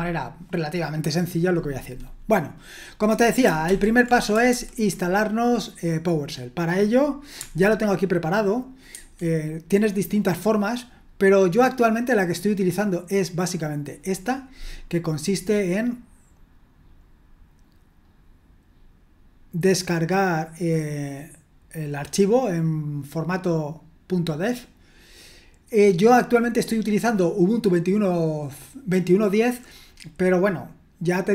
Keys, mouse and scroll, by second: 3.7 ctrl+l, 4.5 super+h, 8.9 alt+2, 15.3-16.8 scroll down 2, 18.0-19.7 scroll up 2, 20.0-21.0 scroll down 2.